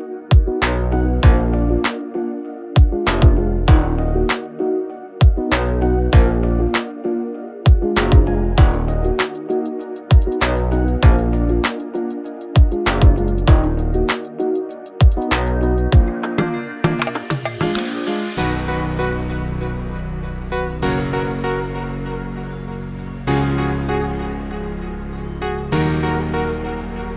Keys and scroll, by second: 0.1 space, 10.9 Delete, 12.5 e, 14.5 space, 15.3 Delete, 19.6 m, 20.4 Up, 23.7 space, 23.9 Escape, 25.8-27.1 typing.